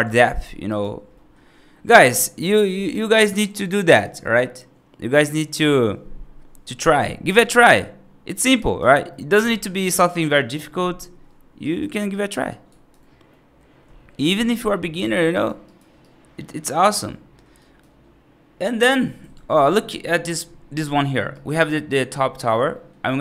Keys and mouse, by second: 0.5 right drag, 1.0 middle drag, 6.9 right click, 7.4 middle drag, 8.5 right click, 8.9 middle drag, 11.5 right click, 12.0 right click, 12.3-12.8 right drag, 13.1 middle drag, 14.9 right drag, 15.2 right drag, 15.5 right drag, 15.9-16.3 right drag, 16.5 right drag, 17.0-17.3 middle drag, 17.5 right drag, 19.1 F3, 19.3 middle click, 20.8 middle click, 21.2 right click, 22.6 middle click.